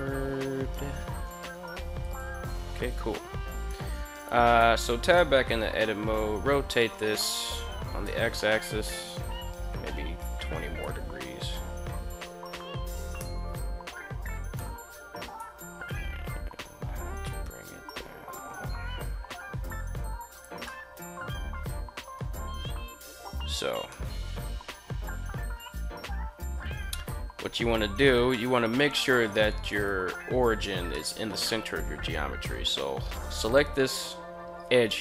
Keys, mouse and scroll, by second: 1.5 click, 2.3 KP_1, 4.0 Tab, 4.6 r, 7.6 x, 10.3 2, 11.2 0, 12.6 Return, 13.9 Tab, 14.8 g, 15.3 z, 19.8 click, 20.1-21.5 middle drag, 23.4-23.9 middle drag, 24.1 middle click, 26.5 Tab, 27.8 middle click, 29.2 alt+right click, 30.4 middle click, 31.9 middle click.